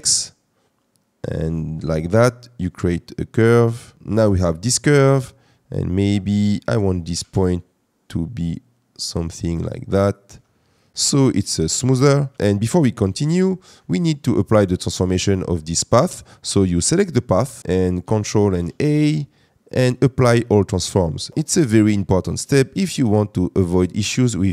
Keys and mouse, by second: 3.9 Tab, 4.6 Tab, 5.9 click, 7.1 g, 7.3 y, 10.0 click, 10.2 Tab, 12.3 Tab, 12.3 Tab, 16.8 click, 18.5 ctrl+a, 22.1 middle drag.